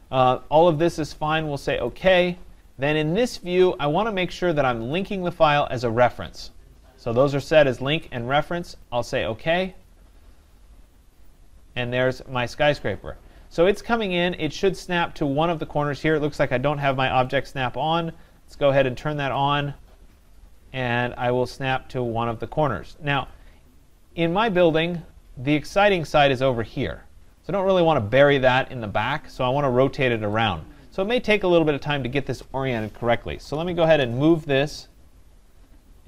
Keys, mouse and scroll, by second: 1.9 click, 3.9 click, 5.1 click, 9.7 click, 17.4 click, 19.4 click, 23.3 click, 24.0 scroll, 25.8 right click, 30.8 right click, 31.4 right click, 31.9 scroll, 33.1-34.4 typing.